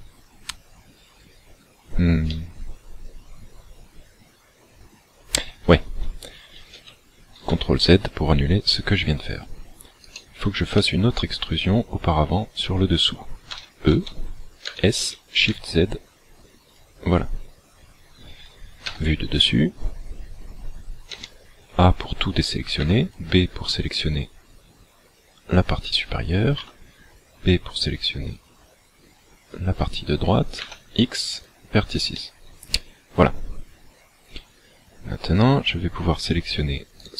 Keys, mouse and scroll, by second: 2.4 middle click, 6.8 ctrl+z, 10.2 alt+right click, 10.8 middle click, 13.6 e, 14.8 s, 16.9 click, 19.0 KP_7, 21.2 a, 22.8 b, 26.6 b, 30.7 x, 32.2 middle click, 37.0 alt+right click.